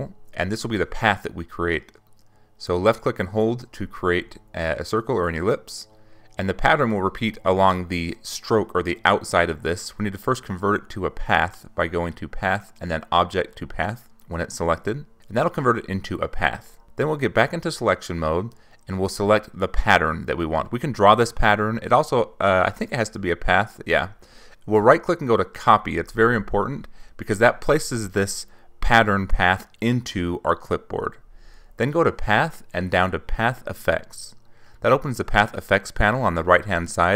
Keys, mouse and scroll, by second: 1.2 click, 3.2-7.5 ctrl+drag, 10.2 click, 13.9 click, 17.6 click, 19.2 click, 20.7 right click, 24.8 click, 26.7 click, 29.9 click, 34.6 click.